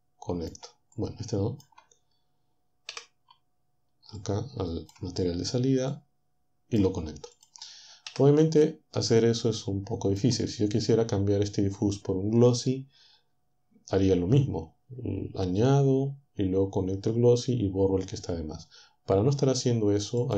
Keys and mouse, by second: 2.9 Delete, 5.9-6.9 drag, 7.3 click, 8.1 Delete, 20.2-20.3 drag.